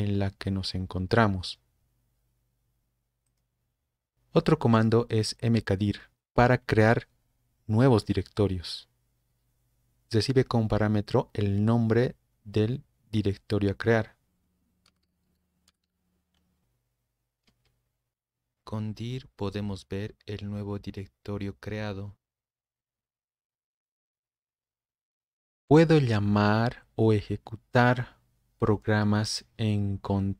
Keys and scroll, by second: 5.9-6.6 typing, 14.6-16.3 typing, 17.5 Return, 17.9-18.8 typing, 19.1 Return.